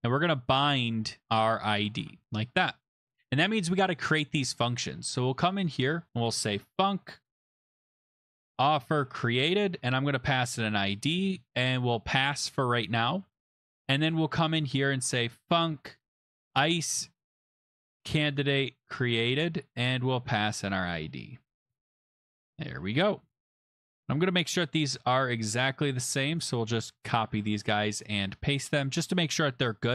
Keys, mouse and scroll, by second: 0.0-2.5 typing, 4.2 click, 5.2 Return, 6.0-22.5 typing, 12.1 Home, 12.3 Home, 12.5 Home, 13.8 Return, 22.9 Return, 22.9 click, 23.0 Return, 24.0 click, 24.2 click, 24.7 ctrl+c, 25.4 click, 25.5 click, 25.6 ctrl+v, 26.3 click, 26.4 click, 26.6 ctrl+c, 27.1 click, 27.2 click, 27.2 ctrl+v, 28.0 click, 28.2 click, 28.7 ctrl+v, 29.5 click.